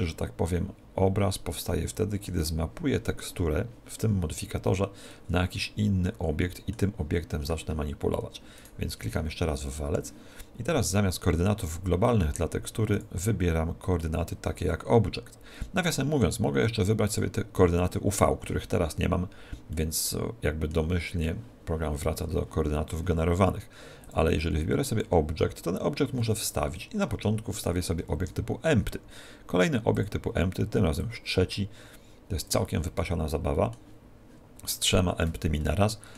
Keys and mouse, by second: 8.7 right click, 13.0 click, 19.7-24.1 middle drag, 24.1 click, 26.4-29.4 middle drag, 28.1 shift+a, 31.0 click, 33.1-34.9 middle drag, 34.9 right click, 35.7-36.1 middle drag.